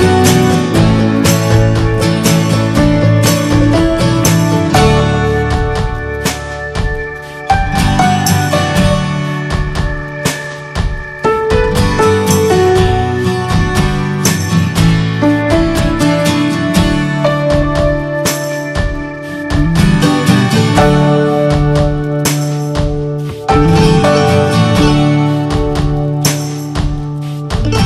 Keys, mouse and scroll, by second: 0.0 drag, 0.5 middle click, 1.4 click, 1.7-2.1 scroll up 3, 2.1 alt+z, 2.4 middle click, 3.2 click, 3.6-4.0 shift+middle drag, 4.0 scroll up 2, 4.5 Tab, 4.7 middle click, 4.8-5.5 scroll up 6, 5.0 shift+middle click, 5.8 click, 7.3 alt+shift+click, 7.8 shift+middle click, 8.5 scroll down 2, 8.8-9.8 shift+middle drag, 9.8 shift+scroll up 6, 10.6 alt+shift+click, 11.1 ctrl+z, 11.4 alt+shift+click, 11.9 alt+shift+click, 12.4 scroll down 2, 12.6 shift+middle click, 13.5 scroll up 2, 14.1 alt+shift+click, 14.6 alt+shift+click, 15.3-16.3 middle drag, 16.3 shift+scroll up 2, 17.0 alt+shift+click, 17.4 alt+shift+click, 18.1 scroll down 5, 18.5 shift+middle click, 19.4 scroll down 1, 19.7-20.8 shift+middle drag, 20.8 shift+scroll up 2, 21.2 middle click, 21.5 scroll down 2, 21.8 shift+middle click, 22.1 scroll up 1, 22.1 middle click, 22.8 scroll up 2, 23.6 alt+shift+click, 23.9 alt+shift+click, 24.1 alt+shift+click, 24.4 scroll down 1, 24.8-26.7 shift+middle drag, 26.7 shift+scroll up 1, 26.7 scroll down 2, 27.0 middle click, 27.6 scroll up 2.